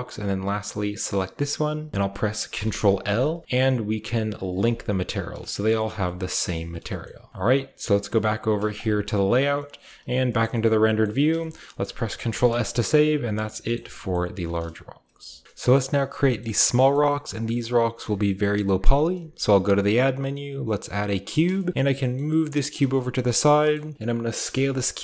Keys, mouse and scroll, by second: 0.9-1.9 shift+middle drag, 2.3 ctrl+i, 4.4 click, 5.2-5.9 shift+middle drag, 5.7 a, 6.3 shift+middle click, 6.6 shift+scroll up 1, 6.8-8.5 shift+middle drag, 6.8-8.5 shift+scroll down 1, 8.5 click, 9.6 typing, 10.8-12.5 shift+middle drag, 10.8-12.8 scroll up 1, 12.1 ctrl+s, 13.5 middle drag, 13.9 middle drag, 14.1-15.4 scroll down 1, 14.5-15.0 middle drag, 14.8-15.4 typing, 15.4 Tab, 16.8-19.0 shift+scroll up 1, 16.9 shift+middle drag, 16.9-17.7 typing, 17.2-19.0 shift+middle drag, 19.1 shift+a, 21.0-23.6 drag, 21.0 middle click, 21.2 middle drag, 21.2 scroll down 1, 21.7-22.1 typing, 21.8 shift+middle click, 21.8 shift+scroll down 1, 22.6 scroll down 1, 23.3-24.4 typing.